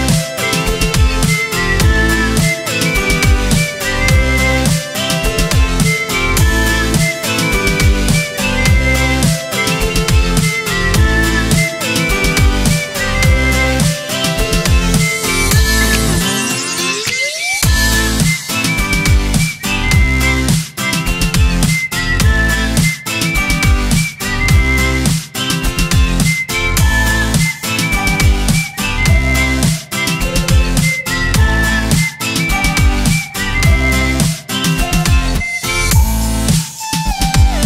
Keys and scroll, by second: 1.9 z, 2.1 space, 3.2-5.9 typing, 11.7 Right, 11.8 Down, 17.1 Up, 18.2 Up, 20.4 Up, 21.9 z, 22.3 z, 23.0 space, 24.8 z, 25.2 space, 25.4 v.